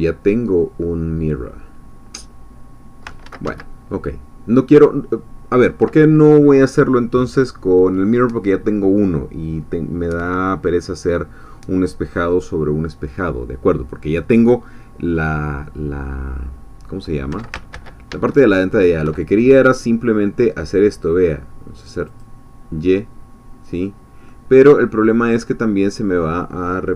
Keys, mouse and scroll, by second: 3.3 ctrl+z, 17.7 ctrl+shift+z, 22.1 click, 23.9-24.3 scroll down 2, 24.3-25.9 middle drag, 25.9-26.2 scroll down 2.